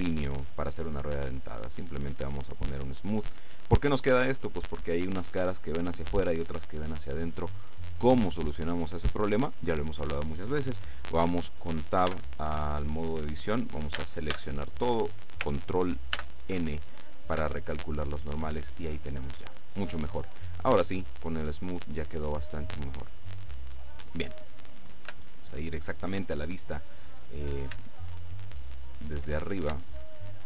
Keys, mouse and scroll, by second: 1.5 click, 12.2 Tab, 14.0 a, 16.3 ctrl+n, 17.5 Tab, 20.4-22.3 middle drag, 22.3-22.8 scroll down 2, 22.8 middle click, 23.5 click, 25.2 KP_7, 28.3-29.5 shift+drag, 29.9-30.4 middle drag.